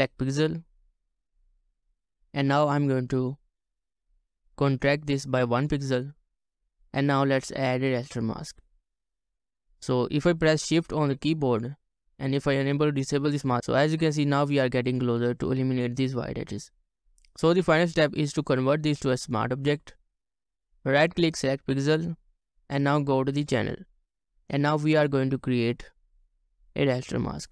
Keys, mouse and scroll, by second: 11.5 shift+click, 12.6 shift+click, 17.6 right click, 20.7 right click.